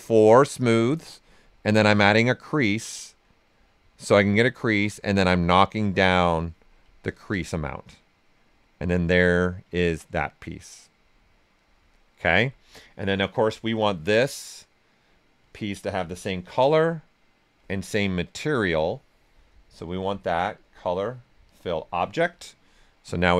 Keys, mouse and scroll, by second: 2.4-4.8 right drag, 4.8-6.9 drag, 6.9 ctrl+right click, 7.4-11.8 right drag, 11.8-13.7 alt+right drag, 13.7-16.1 drag, 16.1-17.9 drag, 17.9-20.5 right drag, 20.5 click, 22.6 right click.